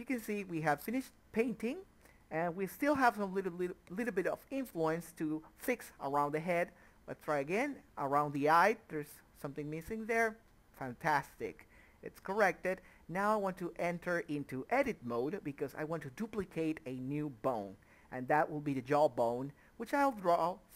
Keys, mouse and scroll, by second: 0.4 click, 0.6 middle click, 0.9-1.3 scroll up 1, 1.3 click, 2.6 middle click, 2.7 click, 3.2 middle click, 3.4 click, 3.7 middle click, 3.9 click, 4.1 middle click, 4.3 click, 4.5 middle click, 4.9 Tab, 5.3 click, 5.4 Tab, 5.9 click, 6.5 ctrl+z, 6.7 click, 6.8 Tab, 7.1 click, 7.3 Tab, 8.0 middle click, 8.3 click, 8.6 middle click, 8.8 click, 9.2 middle click, 9.6 click, 9.8 middle click, 10.1 click, 10.2 middle click, 10.5 click, 10.6 middle click, 10.9 click, 14.7 click, 18.8 click.